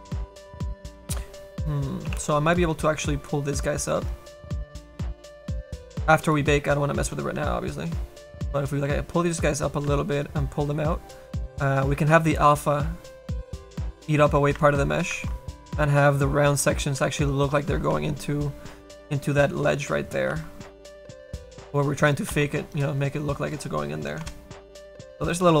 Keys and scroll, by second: 2.2 3, 7.4 a, 10.0 a, 14.6 ctrl+z, 17.1 a, 18.1 a, 20.9 4.